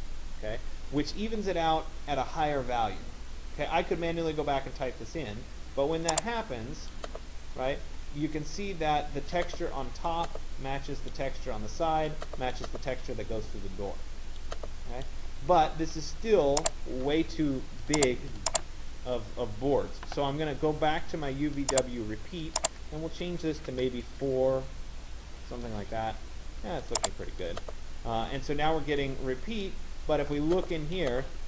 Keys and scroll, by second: 23.4 4, 24.3 Tab.